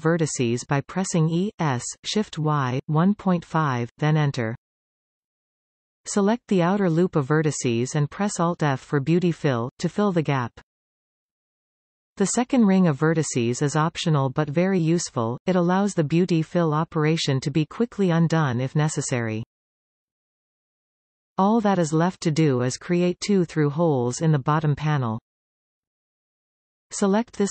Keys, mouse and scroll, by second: 0.1 e, 6.2 alt+shift+click, 6.9-8.2 scroll down 2, 9.3 alt+f, 11.9-14.9 middle drag, 14.9 scroll up 3, 16.4-17.6 middle drag, 17.6-18.0 scroll down 3, 18.0-21.0 middle drag, 23.9-26.9 shift+middle drag, 26.9 click.